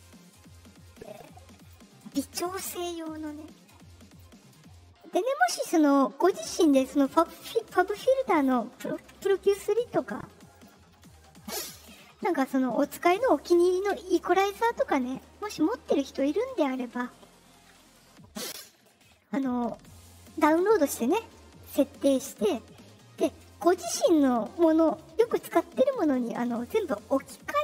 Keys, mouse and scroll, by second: 1.5 click, 3.1-4.1 drag, 4.9 click, 10.5 click, 20.1 click.